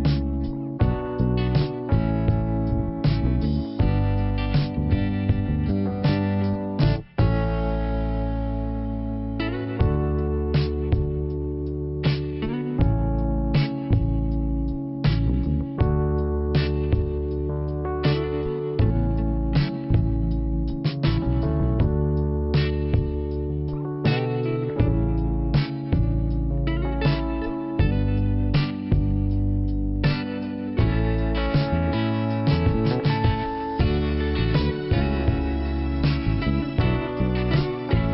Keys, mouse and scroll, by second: 1.5 click, 3.5 click, 5.4 click, 7.7 click, 8.9 click, 10.4 click, 11.0 click, 12.0 click, 15.9 click, 18.6 click, 20.5 click, 20.8 click, 25.0 click, 26.7 click, 27.9 click, 30.0 click, 30.1 click, 31.4 click, 33.0 scroll up 2, 34.0 click, 35.7 click, 35.8 click, 35.9 click, 36.1 double click, 36.2 double click, 36.3 double click, 36.4 double click, 36.5 double click.